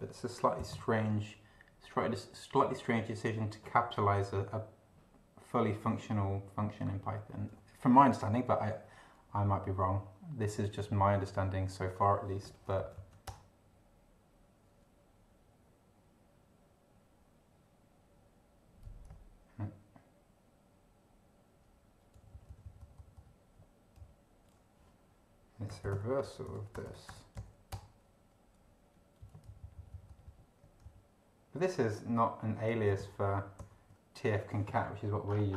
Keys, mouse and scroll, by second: 0.6 ,, 0.6 space, 12.4 0, 12.8 Right, 13.2 Return, 18.8 Up, 22.2 ctrl+Left, 24.0 ctrl+Left, 25.4-26.7 typing, 26.4 Left, 27.4 End, 27.7 Return, 29.2 Up, 29.4 ctrl+Left, 33.0 ctrl+c, 33.6 ctrl+d, 35.2-35.5 scroll up 2.